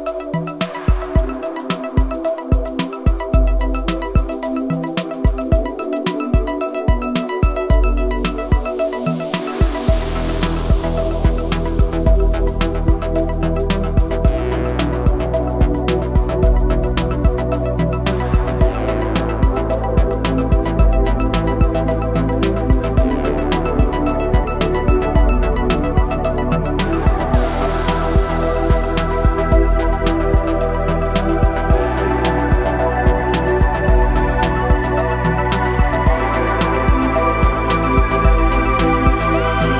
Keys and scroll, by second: 4.4 r, 6.5 KP_9, 7.5 Return, 17.0 shift+s, 27.0 r, 32.5 Escape, 33.2 r, 36.1 KP_9, 37.8 Escape, 38.6 r.